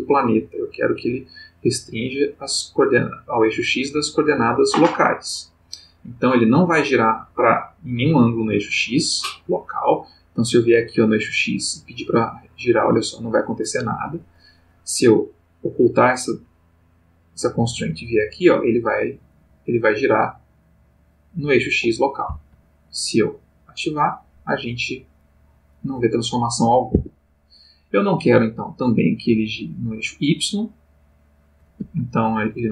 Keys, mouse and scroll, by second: 0.9 click, 2.2 click, 11.1-14.3 drag, 14.0 Escape, 15.3 click, 17.9-22.7 drag, 22.3 Escape, 23.7 click, 24.7-27.5 drag, 26.9 Escape, 29.5 click, 31.0 click, 31.8 Escape.